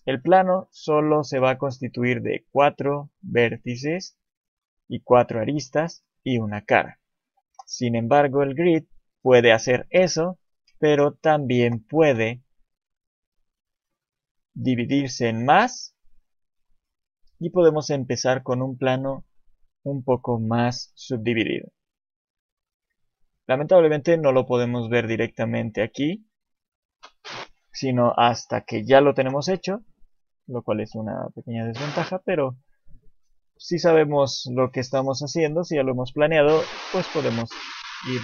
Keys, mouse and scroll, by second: 0.4 shift+middle click, 0.8-1.4 scroll up 1, 1.4 Tab, 2.2 click, 3.7 shift+click, 4.4 click, 6.1 scroll down 3, 7.4 Delete, 8.4 shift+middle click, 8.8 click, 9.0-9.3 scroll up 1, 10.0 Tab, 10.0 scroll up 2, 11.5 Delete, 12.1 shift+a, 14.7 click, 15.6 click, 17.6 click, 17.9 shift+middle click, 20.3-21.1 scroll up 2, 20.8 Tab, 23.1-23.7 scroll down 2, 24.9 Tab, 29.1 Delete, 30.8 shift+c, 31.3-32.4 scroll down 3, 31.8 shift+middle click.